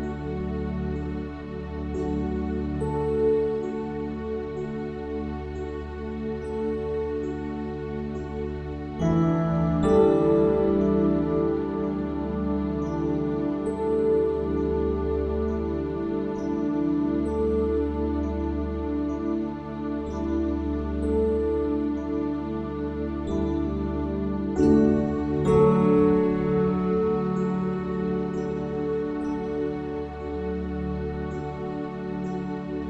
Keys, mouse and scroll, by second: 3.0 Tab, 5.8-7.6 drag, 7.9-12.2 drag, 12.4-14.4 drag, 14.8-19.7 drag, 19.7 s, 25.1 a, 25.4 a, 26.4 s, 30.2 Tab, 31.1 Tab, 32.3 e.